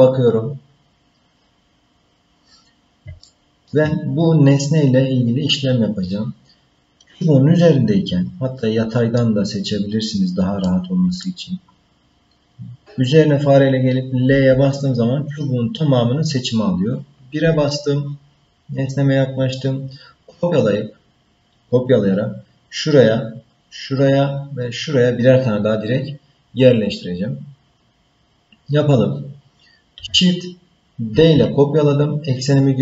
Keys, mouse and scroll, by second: 1.6-2.5 scroll up 6, 3.3 shift+middle click, 8.6 middle click, 9.4-10.6 scroll down 7, 10.6 middle click, 14.3 l, 17.4 KP_1, 18.3-19.3 scroll up 6, 31.1 shift+d.